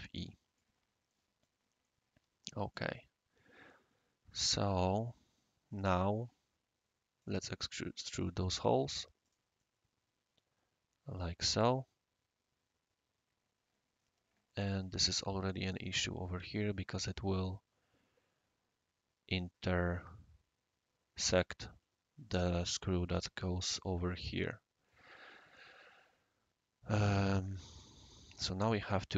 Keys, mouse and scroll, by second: 1.1 middle drag, 1.8 right click, 5.3 scroll down 1, 5.3 scroll up 1, 5.3 scroll down 1, 7.2 click, 8.2 click, 9.2 click, 9.6-16.4 right drag, 27.3-28.5 right drag, 28.8 scroll up 1, 28.9 scroll down 1.